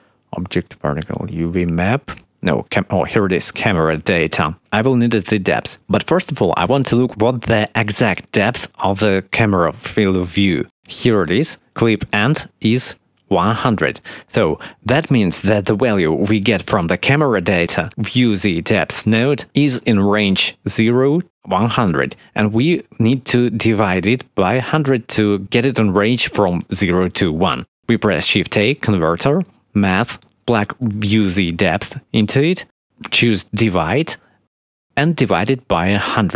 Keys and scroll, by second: 5.7 shift+a, 27.6 shift+a, 35.5 1, 35.8 0, 36.1 Return.